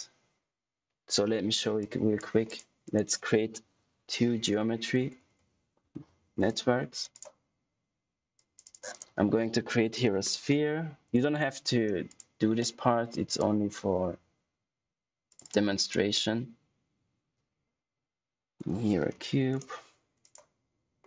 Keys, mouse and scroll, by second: 1.8 click, 2.8 right click, 3.6-6.5 typing, 7.0 click, 8.8 right click, 9.8-11.2 typing, 12.0 click, 15.2 click, 15.7 right click, 18.4-19.6 typing, 20.1 click.